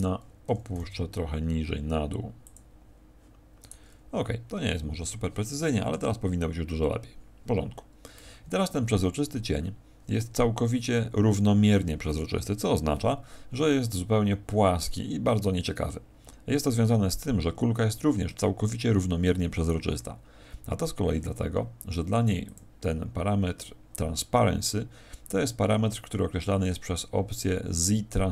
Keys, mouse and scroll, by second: 0.4 g, 2.5 click, 3.6 right click, 4.7 Escape, 5.3 Escape.